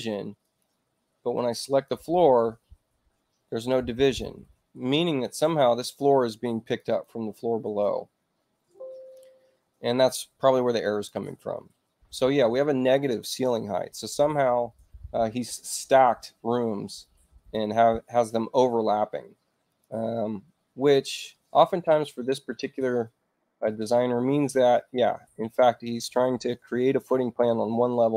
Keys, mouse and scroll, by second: 0.4 click, 1.4 click, 6.6 click, 6.8 click, 10.7 click, 16.9 click, 19.0 space, 19.6 click, 21.8 shift+i, 23.6 shift+i, 27.9 shift+u.